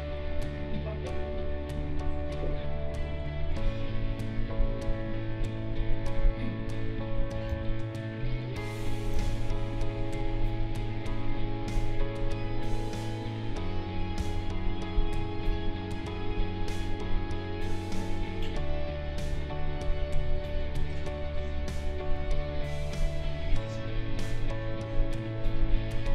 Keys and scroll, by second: 7.5 ctrl+z, 9.1 ctrl+z, 14.2 ctrl+z.